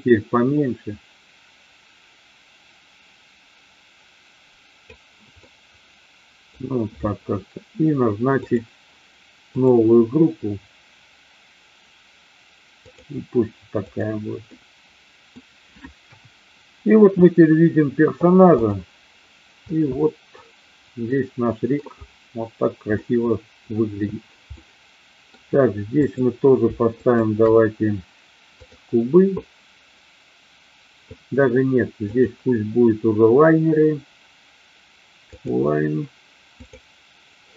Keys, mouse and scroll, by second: 5.4-6.5 middle drag, 9.5-13.0 drag, 13.9 click, 14.4-15.3 middle drag, 16.0 KP_1, 18.5-18.9 drag, 19.7 click, 21.0-21.8 middle drag, 23.0-23.9 middle drag, 24.5-25.3 middle drag, 26.9 shift+click, 32.2-35.5 drag.